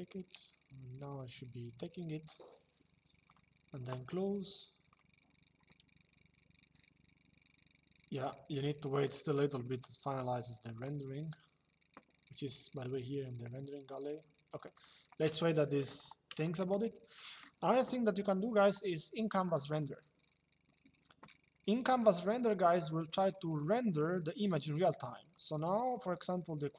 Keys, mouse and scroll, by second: 3.0 click, 4.6 click, 8.7 click, 14.5 click, 15.1 middle click, 16.9 middle click, 19.5 click, 22.5 shift+middle click, 25.0 click.